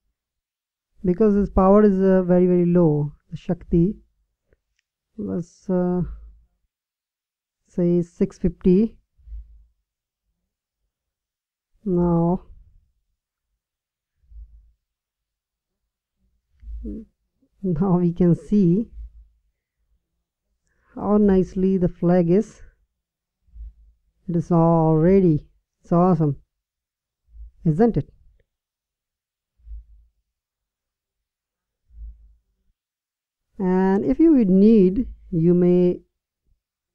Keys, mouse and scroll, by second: 0.1-1.7 middle drag, 5.7-7.5 right drag, 8.4-10.2 drag, 10.2-13.0 middle drag, 14.8-16.5 drag, 19.5 middle click, 20.4 middle click, 21.9 click, 23.7 middle click, 27.7 middle click, 28.5 middle click, 32.4-33.4 middle drag.